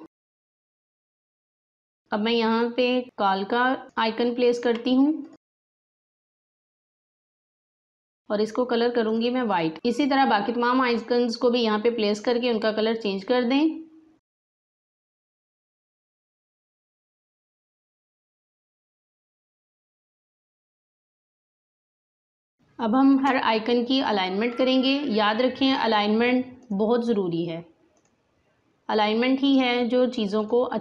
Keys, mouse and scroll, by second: 0.6 click, 1.5-4.2 drag, 4.2 scroll, 5.2 right click, 7.2 click, 13.0-14.4 drag, 14.4 alt+scroll up 1, 14.5 right click, 14.9 click, 16.1 scroll down 2, 16.3 click, 16.4 space, 16.6 click, 17.1 right click, 17.6 click, 18.1 click, 18.7-20.5 drag, 20.5 click, 21.5 right click, 21.8 click, 22.3 alt+scroll up 1, 22.5 space, 22.5 click, 22.7 space, 24.1-30.8 drag.